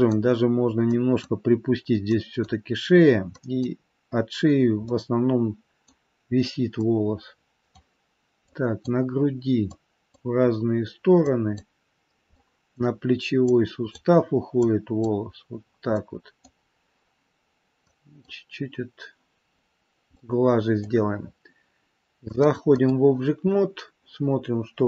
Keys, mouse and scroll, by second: 1.0 click, 2.3 click, 3.8 click, 4.5-4.8 scroll down 2, 4.8 middle click, 6.7 middle click, 8.6 click, 9.9 click, 11.4 click, 12.2 middle click, 13.6 click, 14.8 click, 15.9 middle click, 17.0-17.5 scroll down 2, 18.0 click, 19.6-20.1 scroll down 2, 20.1 middle click, 22.2 click, 23.5-23.8 scroll up 4.